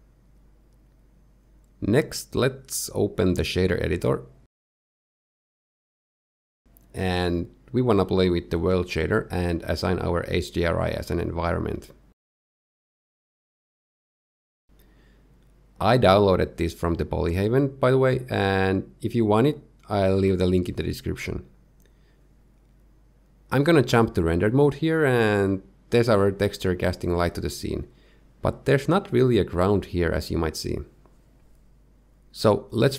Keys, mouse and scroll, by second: 1.1 scroll down 2, 1.4 shift+middle click, 3.6 click, 4.6 click, 5.1 click, 7.1 click, 8.0 click, 9.3 shift+middle click, 9.7-10.2 scroll up 1, 10.2 scroll up 5, 10.3 shift+middle click, 11.2 click, 15.8 click, 22.0 z, 25.4 click, 25.8 middle click, 27.1 middle click, 29.6 z, 29.9 middle click.